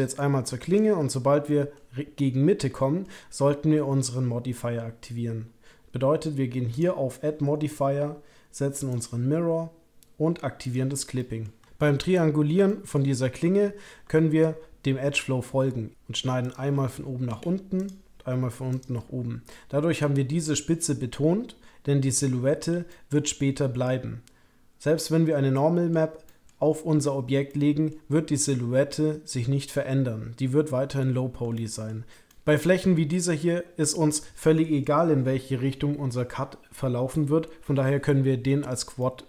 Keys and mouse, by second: 0.1 click, 1.4 middle click, 2.7 middle click, 6.7-9.0 drag, 10.6 click, 11.2 middle click, 12.7 middle click, 14.1 shift+middle click, 15.9 k, 17.2 k, 22.9 shift+click, 25.0 click, 25.5 shift+click, 26.2 click, 27.5 click, 28.9 click, 31.5 shift+click, 32.1 k, 32.3 click, 39.0 click.